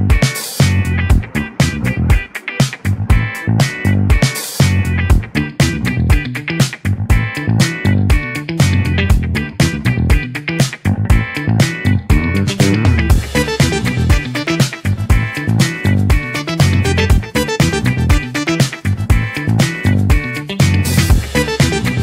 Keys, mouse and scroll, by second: 3.0-4.3 middle drag, 4.3 click, 6.5-7.9 middle drag, 7.9 click, 8.8 click, 10.1 click, 15.3 click, 15.7-16.2 scroll down 2, 16.2-17.0 middle drag, 17.0-18.1 scroll down 6, 18.1-18.9 middle drag, 18.9-19.5 scroll up 3, 19.5 middle click, 20.3 click.